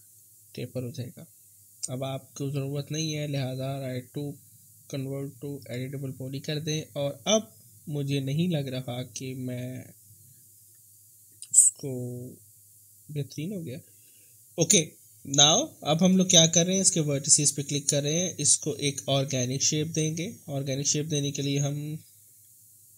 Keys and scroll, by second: 20.8 w.